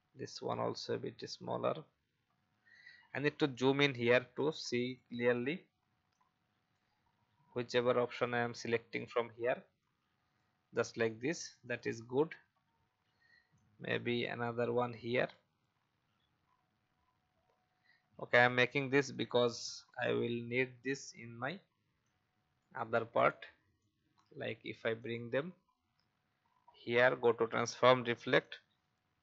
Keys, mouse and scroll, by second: 2.3 alt+scroll up 1, 3.5-6.9 drag, 7.0 alt+scroll down 1, 8.4 click, 10.8-11.6 alt+scroll down 1, 11.6 click, 12.5 alt+scroll up 1, 13.5 alt+click, 18.0 alt+scroll up 1, 19.1 click, 20.3-20.7 alt+scroll down 1, 22.0 click, 23.8 alt+click, 24.9 right click, 28.4-29.2 drag.